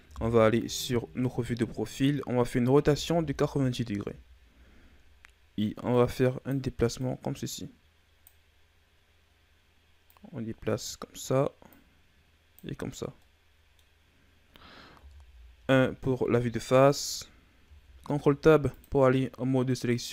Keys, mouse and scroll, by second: 0.0 KP_3, 0.9-1.3 ctrl+scroll up 4, 2.6 r, 5.8-9.9 drag, 10.0 click, 12.7-13.1 scroll down 5, 13.1-14.9 middle drag, 14.9 KP_1, 15.9-17.5 scroll up 4, 17.5 ctrl+Tab.